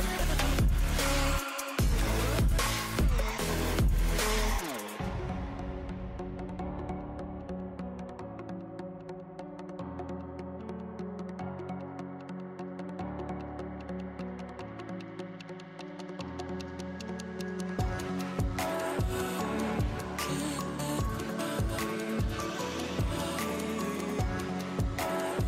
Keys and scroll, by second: 3.4 l, 4.1 0.